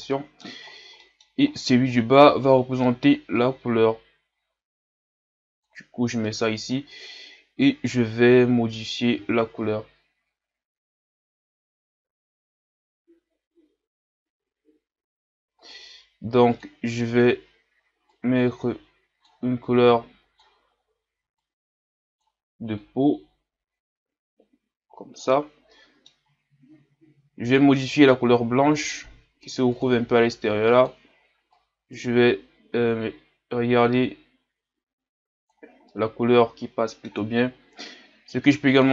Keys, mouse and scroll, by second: 4.7 click, 6.2-14.6 middle drag, 15.7-18.1 drag, 25.7 middle click, 26.2-28.8 scroll up 5, 28.8 scroll up 1, 28.9-30.7 drag, 35.9-38.9 middle drag.